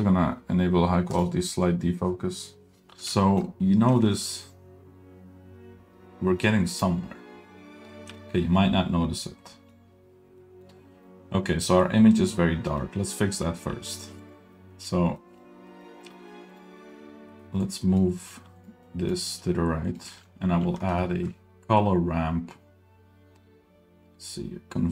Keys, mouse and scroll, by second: 1.2 click, 3.2 shift+middle click, 3.9 g, 8.1 g, 9.5 middle click, 10.4 middle drag, 10.9 middle click, 12.3-12.8 middle drag, 13.3 middle click, 13.7 g, 14.9-15.3 scroll down 5, 15.3 middle click, 15.7 middle click, 15.7 scroll up 1, 16.1 g, 16.9 middle drag, 17.1-17.4 scroll up 3, 17.4 middle drag, 17.7 drag, 18.3 g, 18.9 drag, 19.4 g, 20.1 middle click, 20.3-20.9 scroll up 1, 21.0 shift+a, 21.2 shift+a.